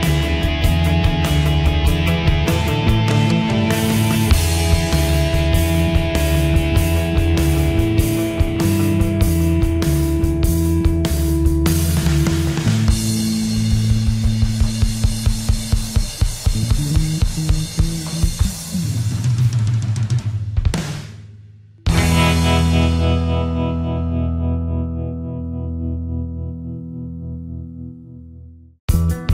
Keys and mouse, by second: 2.2 click, 3.2 right click, 4.7 click, 4.8 middle click, 9.2 middle click, 13.3 click, 18.5 Delete, 19.6 click, 23.4 shift+middle click, 26.2 middle click, 28.1 click.